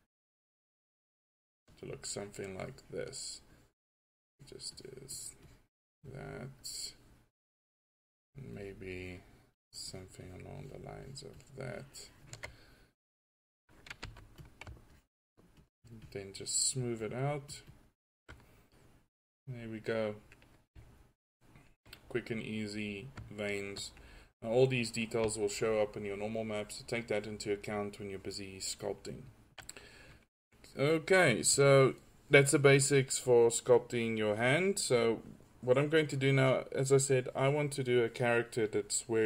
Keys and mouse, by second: 13.3 drag, 14.1 f, 19.9 click, 20.1 drag.